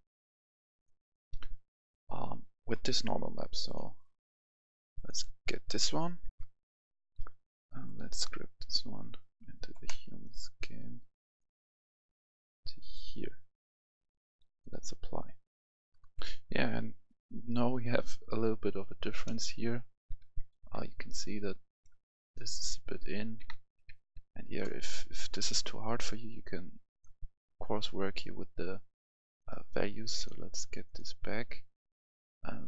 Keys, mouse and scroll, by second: 6.3 F11, 6.3 F10, 7.6 F10, 7.7-9.7 drag, 9.7 right click, 10.8 click, 16.0-22.3 right drag, 20.2 w, 20.5 w, 22.5 right click, 22.8 s, 23.2 s, 23.4 w, 23.9 s, 25.9 typing, 26.9 click, 27.8 scroll up 1, 29.3-32.6 drag.